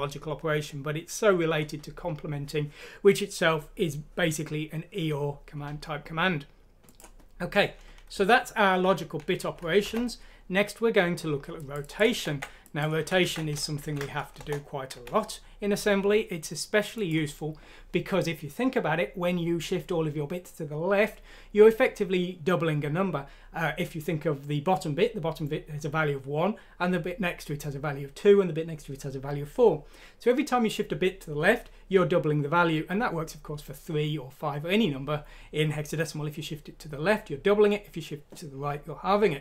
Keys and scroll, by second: 13.9-14.4 typing, 14.9 Escape.